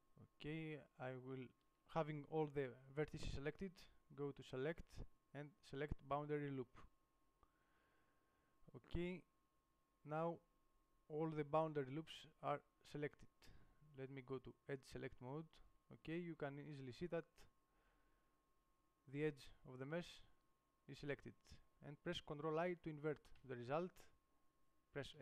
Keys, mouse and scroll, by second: 4.2 middle click, 16.6 middle click, 23.6 ctrl+i.